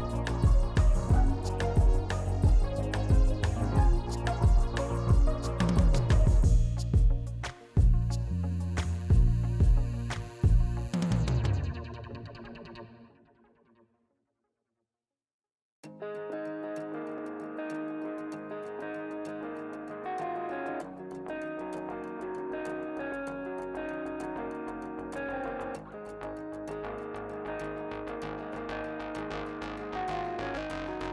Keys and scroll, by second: 1.1 F4, 1.3 s, 12.4 F4, 13.9 a, 14.4 s, 21.7 s, 25.9 i, 26.0 Return, 26.9 7, 27.0 w, 29.0 F4.